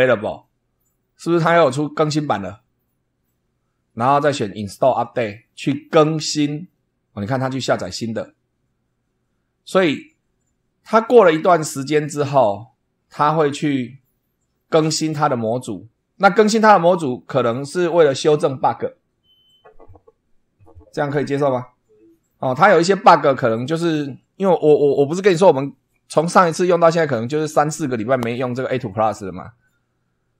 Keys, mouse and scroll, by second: 4.5 click.